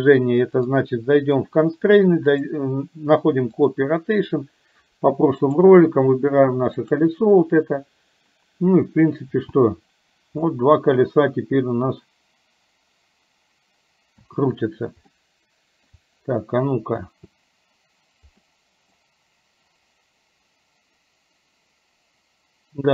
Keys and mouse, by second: 0.6 click, 1.4 click, 2.4-3.9 drag, 9.5 space, 14.3 space, 15.3 shift+middle click, 17.0 space, 18.5 middle click.